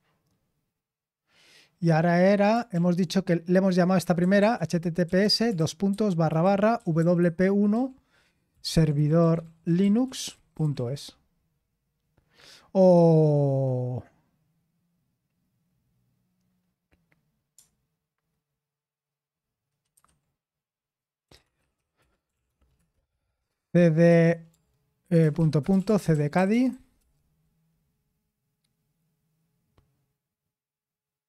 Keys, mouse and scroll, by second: 2.7 ctrl+l, 3.9-11.2 typing, 19.9 super+7, 21.0-22.7 typing, 23.8-27.1 typing.